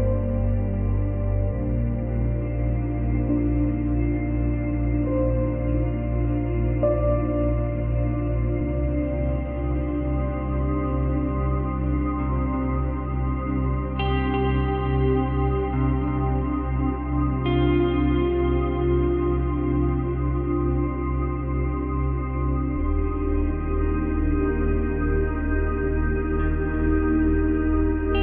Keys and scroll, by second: 3.7 space, 14.7 space, 19.0 ctrl+z.